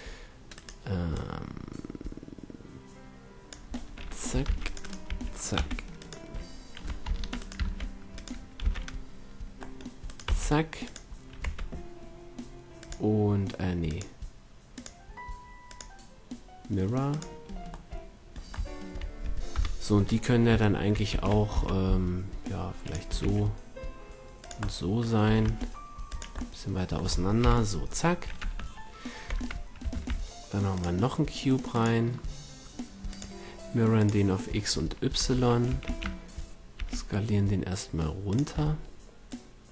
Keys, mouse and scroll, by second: 0.5 right click, 1.1-2.4 middle drag, 2.4 right click, 3.7-4.4 middle drag, 4.4 ctrl+r, 5.1 a, 5.5 c, 7.6 ctrl+Tab, 8.6 c, 10.3 x, 11.4 Tab, 12.8-17.1 drag, 19.5 KP_7, 21.1 s, 22.9-23.4 drag, 23.1 s, 25.2 s, 27.4 KP_7, 28.4 Tab, 29.3 Tab, 29.9 shift+a, 35.1 Tab, 36.7 shift+s.